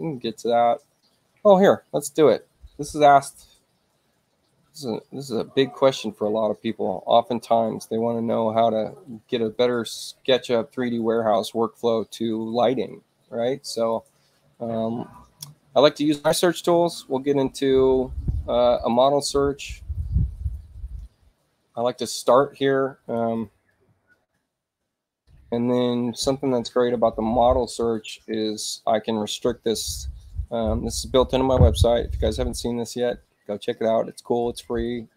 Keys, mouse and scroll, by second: 5.0 click, 8.2-9.9 drag, 10.9 click, 13.6 click, 16.0 click, 18.7 click, 22.0 click, 22.8-25.0 typing.